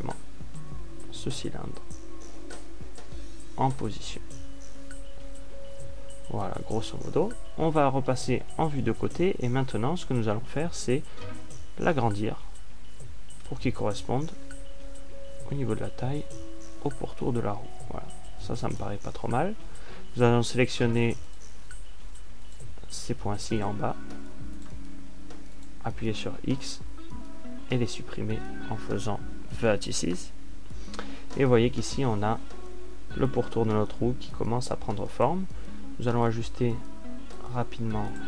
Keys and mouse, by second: 0.6-3.0 ctrl+alt+drag, 7.3 click, 12.8 ctrl+alt+s, 20.7 a, 27.9 x, 38.0 right click.